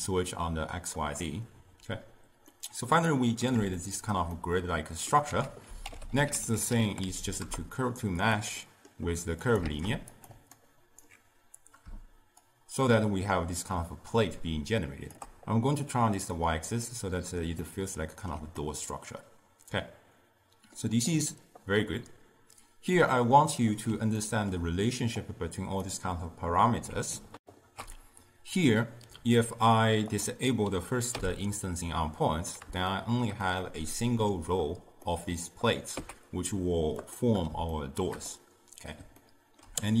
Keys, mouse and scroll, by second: 2.6-5.4 middle drag, 5.4 ctrl+a, 8.7-9.5 middle drag, 9.5 click, 9.7 shift+d, 10.6-12.5 alt+right drag, 12.5-15.5 shift+drag, 16.2 click, 17.0-21.7 middle drag, 23.0-25.3 middle drag, 25.3 click, 27.5 ctrl+alt+shift+q, 30.2 click, 31.2 m, 33.0-36.0 shift+middle drag, 36.0 z, 37.8-40.0 shift+middle drag.